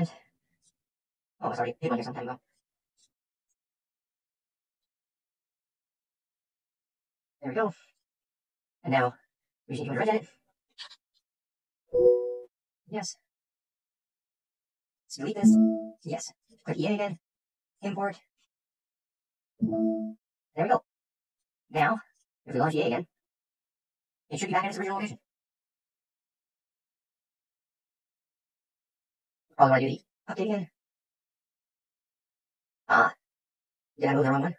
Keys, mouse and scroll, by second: 0.7 right click, 2.5 right click, 4.5 click, 5.5 click, 5.6 click, 6.1 click, 6.9 click, 6.9 right click, 7.9 click, 9.9 click, 11.5-13.0 typing, 11.8 click, 12.5 click, 22.1 click, 22.6 click, 31.9 scroll, 33.7 scroll.